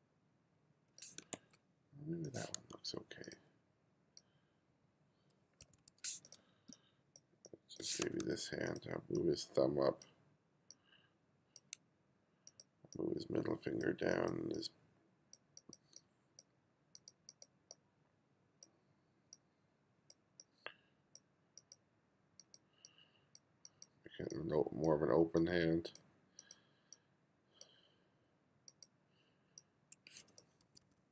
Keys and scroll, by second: 1.4 super+z, 5.7 1, 6.7 space, 8.1 2, 30.7 1.